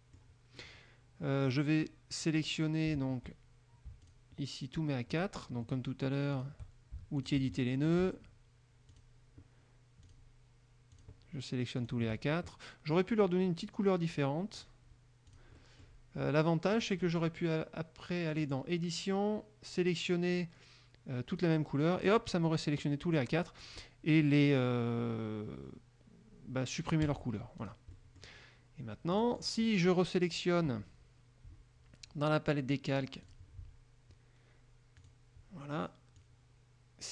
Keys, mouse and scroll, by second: 1.6 click, 4.2 shift+click, 5.3 shift+click, 6.5 shift+click, 7.4 shift+click, 7.6 shift+middle click, 8.0 click, 8.2 shift+middle click, 9.0 shift+click, 10.2 shift+click, 11.1 shift+click, 12.0 shift+click, 14.7 click, 15.4 click, 16.9 click, 18.6 click, 21.4 click, 22.9 middle click, 27.2 click, 27.8 click, 29.2-29.8 drag, 33.4 click, 35.2 click, 36.4-37.1 drag.